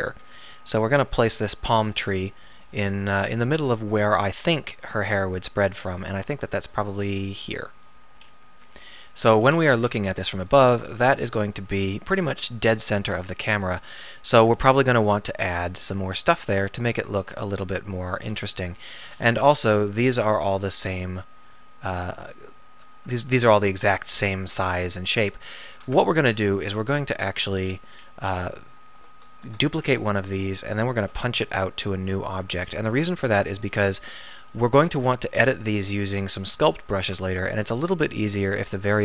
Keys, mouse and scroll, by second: 0.1-1.3 drag, 1.3 KP_7, 2.1 KP_1, 3.1 KP_3, 4.4 r, 6.2 g, 6.9 r, 17.2-24.0 middle drag, 25.8 Tab, 29.0 Tab, 29.8 shift+d, 31.1 p, 32.3 Tab, 33.4 Tab, 34.6 KP_3, 35.5 KP_1, 36.0 KP_3.